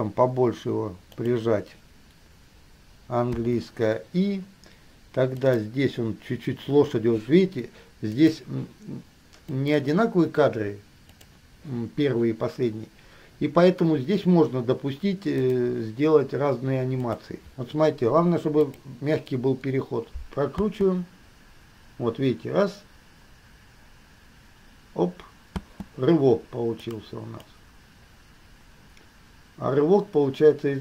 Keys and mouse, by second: 3.6 i, 5.6 click, 8.4 click, 9.7 click, 11.3 click, 15.7 click, 17.3 click, 18.9 click, 20.8 space, 25.8 space, 26.9 click, 27.7-30.8 drag.